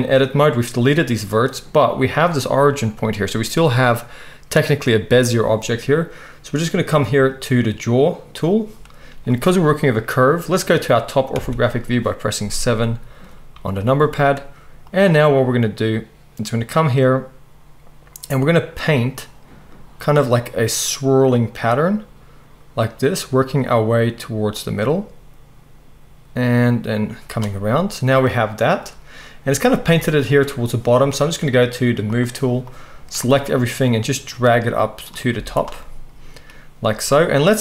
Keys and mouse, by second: 11.4 KP_7, 29.8 z, 35.3 z.